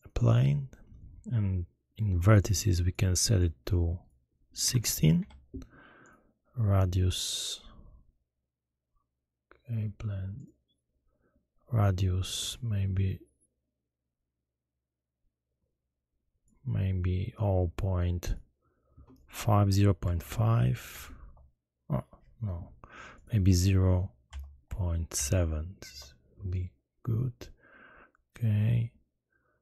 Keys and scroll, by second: 5.1 6, 20.1 0, 20.2 ., 20.9 5, 21.2 Return, 24.3 0, 24.6 ., 25.1 7, 25.9 Return.